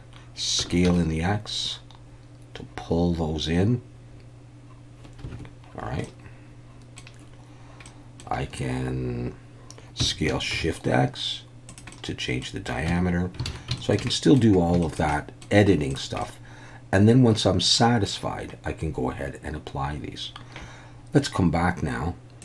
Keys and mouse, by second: 0.6 s, 0.9 x, 5.3 Escape, 6.0-7.0 middle drag, 7.9 middle click, 8.5 Tab, 10.0 s, 10.5 shift+x, 11.7 click, 12.1 middle click, 12.9 Tab, 13.5 alt+a, 13.8 shift+middle drag, 14.1 middle click, 14.8 shift+middle click, 15.1-15.4 middle drag, 16.2-18.1 middle drag.